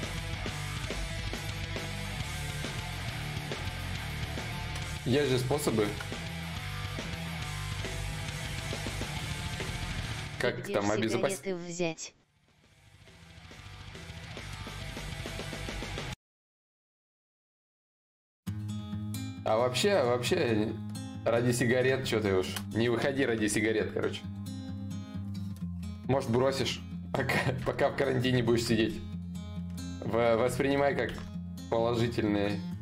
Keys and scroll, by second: 20.5 ctrl+z, 20.5 y, 30.6 ctrl+z, 30.6 ctrl+y, 32.6 ctrl+z.